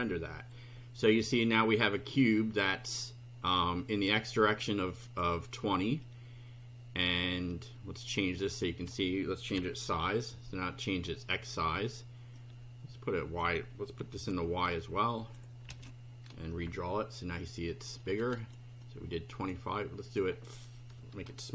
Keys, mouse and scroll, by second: 4.0-5.3 drag, 8.4 click, 9.5 5, 9.9 F5, 12.4-13.5 drag, 14.1 ctrl+c, 14.7 ctrl+click, 15.7 ctrl+v, 16.7 F5, 18.4 click, 18.8 click, 20.1 click.